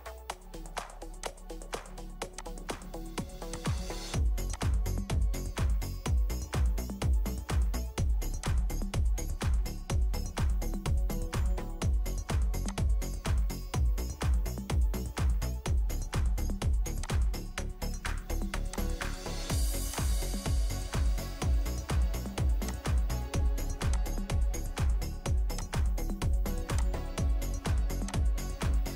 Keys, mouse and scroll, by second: 5.9 1, 6.2 Return, 6.2 1.